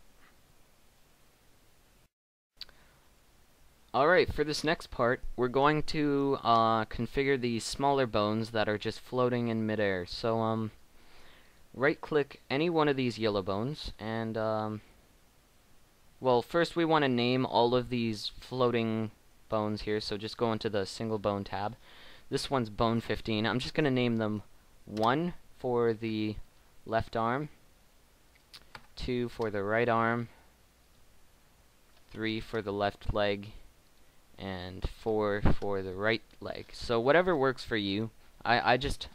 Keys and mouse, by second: 1.4 middle click, 2.4-4.1 middle drag, 9.1 right click, 14.3 middle click, 16.2 middle click, 23.2-26.5 middle drag, 26.5-30.6 right drag, 30.8-34.7 right drag, 34.7 click, 37.9-38.9 middle drag.